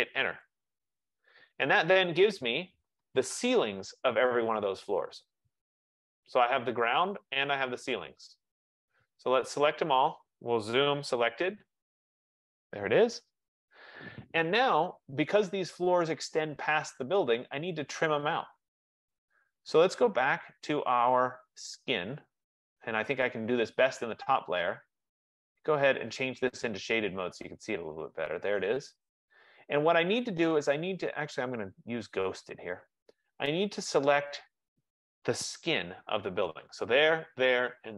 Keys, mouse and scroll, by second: 0.5 Return, 2.9 click, 4.2 middle click, 5.2 scroll, 5.8-7.2 scroll, 7.2-8.0 scroll, 8.0-9.8 scroll, 9.8 click, 10.0 F15, 10.2-11.6 typing, 12.2 click, 20.9 click, 21.5 click, 24.4 click, 24.6 click, 25.9 click, 27.1 click, 31.5 click, 32.6 click, 34.3 click.